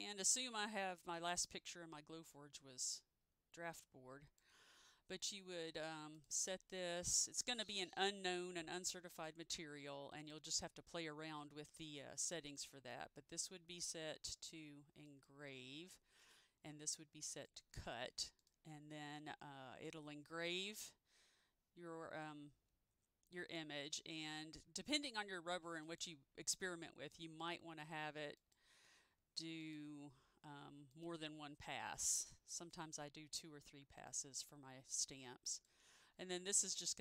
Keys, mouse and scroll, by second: 1.1-1.7 scroll down 1, 1.7 scroll up 1, 2.3-2.8 scroll down 1, 2.8-3.3 scroll up 1, 3.9 click, 12.7 click, 15.2 click, 17.4 click, 26.0 click.